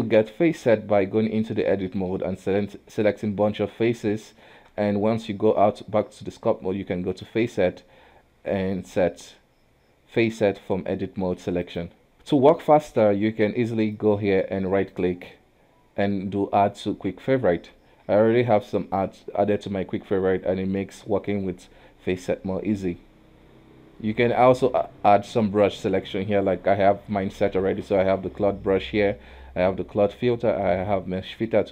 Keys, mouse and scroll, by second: 0.4 shift+z, 1.9 click, 3.8 middle click, 4.0 Tab, 4.8 shift+z, 7.1-10.3 drag, 12.1 KP_1, 12.3-13.8 middle drag, 13.8-17.0 drag, 18.0 q.